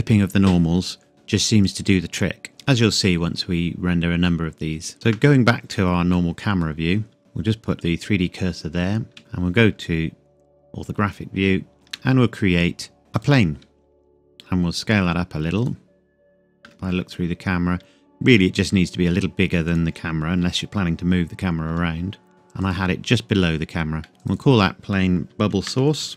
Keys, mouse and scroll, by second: 4.9 click, 5.1 KP_0, 5.8-6.1 scroll down 1, 6.1 middle click, 6.7 scroll down 1, 7.2 click, 9.1 KP_1, 9.7 scroll up 1, 11.7 shift+a, 13.1 shift+a, 13.2 click, 14.0 s, 15.6 click, 16.6 KP_0, 17.4-17.9 scroll down 1, 18.3 s, 19.7 click, 21.7 g, 22.3 z, 22.6 click, 23.2-24.0 scroll down 1, 24.0 middle click, 24.2 click, 25.5-26.1 typing.